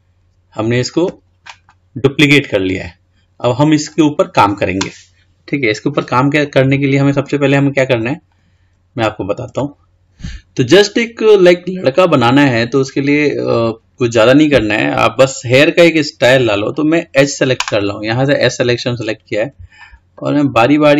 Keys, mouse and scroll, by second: 1.9-5.4 middle drag, 6.7-7.8 scroll up 5, 7.8-9.9 middle drag, 11.3-14.4 scroll up 1, 16.5 click, 19.9 shift+click.